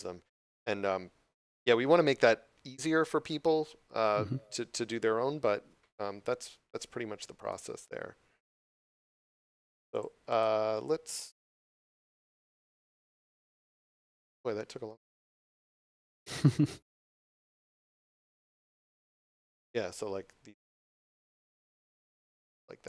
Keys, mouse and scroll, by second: 7.3 right click, 9.8 click, 20.9 right click, 21.6 click.